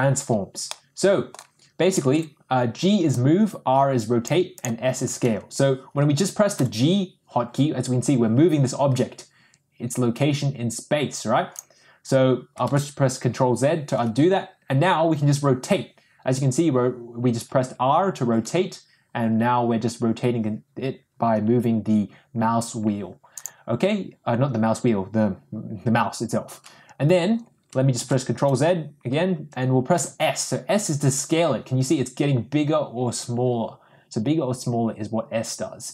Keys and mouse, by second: 0.9-1.4 middle drag, 6.5 g, 12.6 ctrl+z, 15.2 r, 27.9 ctrl+z, 29.9 s.